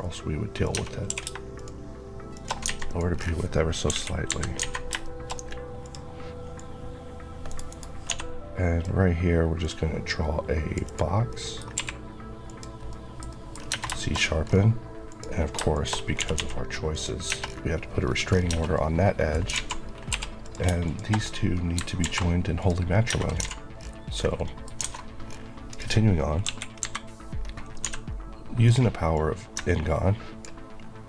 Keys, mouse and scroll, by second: 0.5 click, 0.6 Tab, 0.9 q, 1.5 shift+click, 2.2 shift+Left, 2.6 alt+a, 2.8 click, 3.1-3.8 scroll down 1, 3.8 KP_1, 4.1 KP_3, 4.5 alt+a, 4.9 shift+middle click, 5.2 scroll up 1, 5.7 click, 7.3 right click, 7.6 Right, 7.9 d, 9.5 click, 11.0 click, 11.2 middle click, 11.6 q, 12.3 click, 12.8 middle click, 13.4 scroll up 1, 13.7 shift+Tab, 13.8 shift+middle click, 14.0 shift+scroll up 1, 15.0 shift+click, 15.6 shift+Left, 16.1 g, 16.8 click, 17.2 Tab, 17.4-17.9 scroll down 1, 17.9 scroll up 1, 18.6 Tab, 18.7 middle click, 19.4 alt+z, 20.0 z, 20.3 click, 21.1 click, 21.9 alt+m, 22.5 click, 23.0 Tab, 23.3 alt+z, 23.6-24.0 scroll down 2, 24.3 middle click, 24.7 alt+a, 24.8-25.1 alt+scroll down 1, 25.6 alt+click, 26.3 KP_1, 26.7 KP_3, 27.3-27.7 scroll, 27.7 scroll up 1, 27.7 d, 28.5 click, 29.0 click.